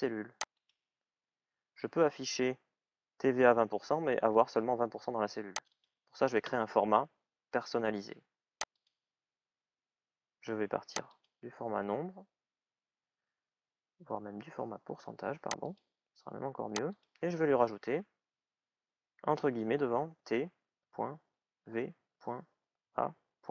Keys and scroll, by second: 19.9-23.1 typing.